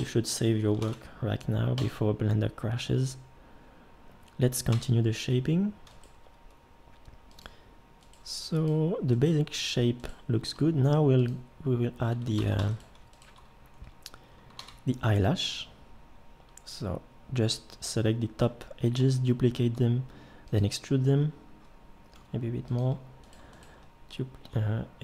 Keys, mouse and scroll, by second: 0.0 Escape, 0.8 ctrl+s, 4.7 Tab, 6.2 g, 8.2 g, 9.3 g, 10.6 g, 12.4 ctrl+Tab, 14.6 shift+d, 19.0 e, 22.1 g.